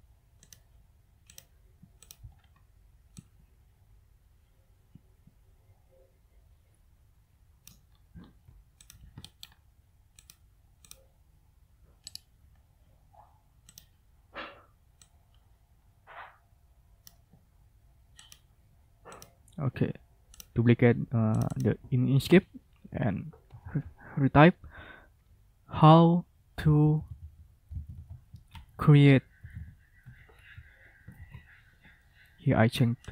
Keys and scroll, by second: 22.0 ctrl+a, 23.4 Caps_Lock, 23.5-30.0 typing, 31.1 ctrl+a.